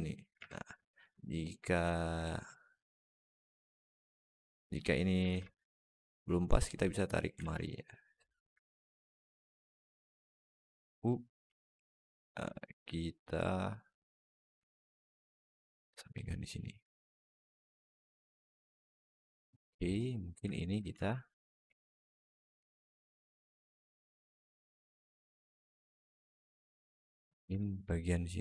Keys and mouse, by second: 0.2 alt+z, 0.7 alt+shift+middle click, 1.1 alt+middle click, 2.6-4.6 alt+middle drag, 5.1 alt+z, 5.6 click, 6.4 click, 7.2 alt+z, 7.5 alt+middle click, 8.8-11.2 drag, 11.4 alt+middle click, 12.4 alt+shift+middle click, 13.1-14.2 drag, 14.5-15.6 alt+middle drag, 19.2 alt+middle click, 20.4 alt+shift+middle click, 21.5 alt+z, 21.9 alt+middle click, 22.4 alt+z, 23.0 alt+shift+middle click, 23.6 alt+shift+middle click, 24.2-25.6 alt+middle drag, 27.0 alt+z, 27.4 alt+middle click, 28.1 click.